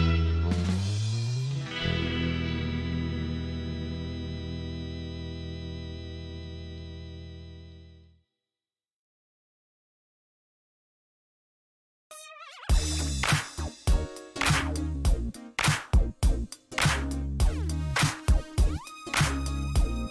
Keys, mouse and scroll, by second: 0.5 click, 1.7 click, 4.9 scroll down 1, 5.4 click, 5.7 space, 8.3 click, 10.0 middle click, 10.3 scroll down 1, 10.7 middle click, 11.5 scroll up 1, 12.1 scroll up 1, 13.5 click, 14.6 click, 15.4 scroll up 2, 15.7 middle click, 17.0 click, 17.8 click, 18.2 right click, 18.9 scroll down 1, 19.2 middle click, 19.7 scroll up 1.